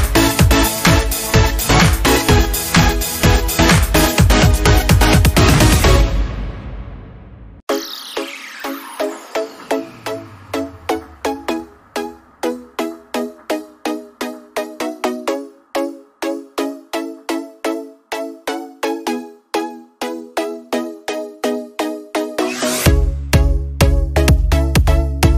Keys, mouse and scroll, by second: 0.4-6.1 drag, 6.1-9.0 alt+drag, 9.0-11.4 drag, 11.4 scroll up 1, 11.9-19.2 drag, 19.0 alt+Num_Lock, 19.2-23.3 alt+drag, 23.3-25.3 drag.